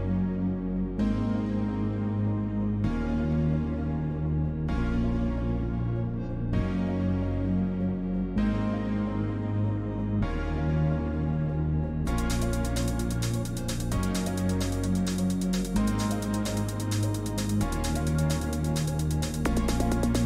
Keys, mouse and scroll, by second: 11.0-11.7 scroll down 1, 12.2 click, 13.2 scroll down 1, 13.4 click, 14.9 click, 16.1 click, 16.1 scroll down 1, 16.5 scroll, 17.1 scroll down 2, 18.5-19.4 scroll.